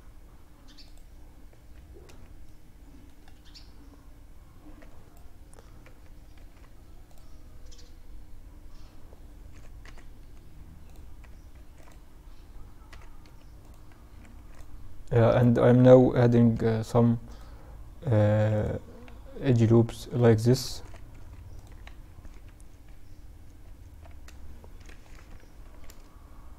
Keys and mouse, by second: 0.6 Tab, 1.4 middle click, 1.5 click, 1.6-3.8 middle drag, 5.6 ctrl+r, 10.8 ctrl+r, 13.5 ctrl+r, 17.5 ctrl+r, 21.5 Tab, 22.0 Tab, 22.8 Tab, 23.1 Tab, 24.1 KP_1, 24.6 z, 25.1 a, 26.1 b.